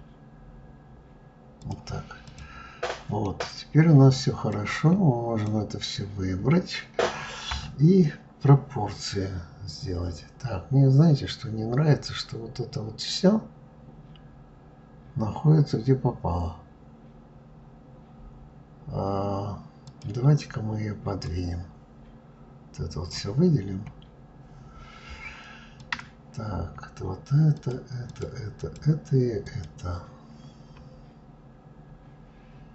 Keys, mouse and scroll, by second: 1.9 click, 2.5 middle click, 3.0-4.2 scroll down 2, 4.2 click, 7.2 KP_3, 10.1 scroll down 2, 18.1-19.5 scroll up 2, 19.5 click, 20.9 click, 23.3-23.8 scroll down 2, 23.8-25.5 scroll up 1, 25.5 click, 27.2 shift+click, 27.7 shift+click, 28.2 shift+click, 29.1 shift+click.